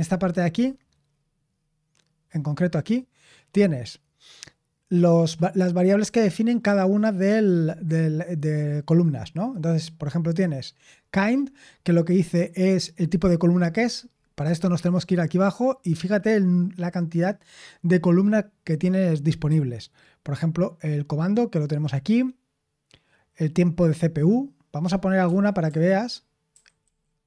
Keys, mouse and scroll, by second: 0.5-3.4 scroll up 1, 3.4-6.6 scroll up 1, 6.6-9.1 scroll up 1, 9.1-10.2 scroll up 1, 10.2-11.4 scroll up 1, 11.4-13.6 scroll up 1, 13.6-20.3 scroll up 1, 20.3-21.6 scroll up 1, 21.6-25.2 scroll up 1, 25.2 Escape, 25.6-27.2 typing.